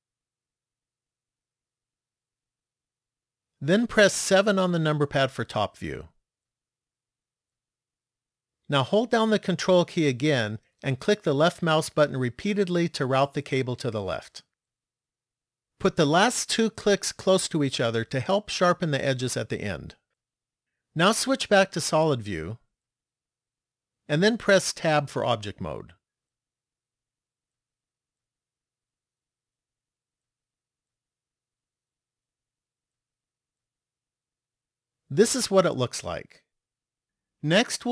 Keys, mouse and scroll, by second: 0.7 ctrl+click, 4.0 KP_7, 4.9-6.6 scroll down 3, 7.0 shift+middle click, 10.7 ctrl+click, 11.7 ctrl+click, 12.6 ctrl+click, 13.6 ctrl+click, 14.6 ctrl+click, 15.9 ctrl+click, 17.3 ctrl+click, 21.5 click, 26.6-27.6 scroll down 1, 27.7 middle click, 32.7 shift+middle click.